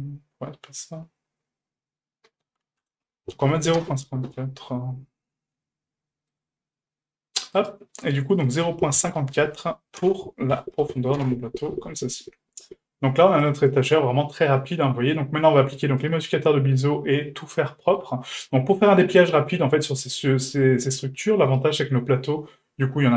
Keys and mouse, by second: 5.5-6.3 middle drag, 7.5 right click, 8.3-11.7 drag, 12.0-12.7 middle drag, 13.0 a, 13.7-14.8 middle drag, 15.4 middle click, 16.0 right click, 16.4 middle drag, 17.4-17.9 middle drag, 20.0 middle drag, 20.7 shift+middle drag, 21.5 right click, 21.8 shift+middle drag, 22.7 Tab.